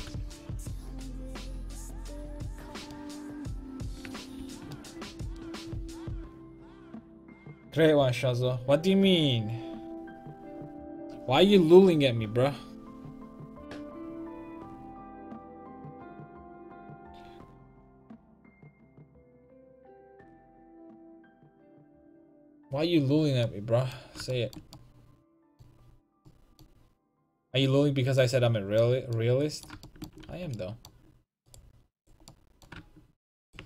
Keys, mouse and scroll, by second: 0.2 click, 1.7 click, 2.6 click, 4.4 ctrl+z, 23.7 middle click, 24.4 middle click, 28.3 middle click, 28.8 middle click, 29.0 middle click, 30.3 a, 31.5 click, 32.4-33.6 middle drag.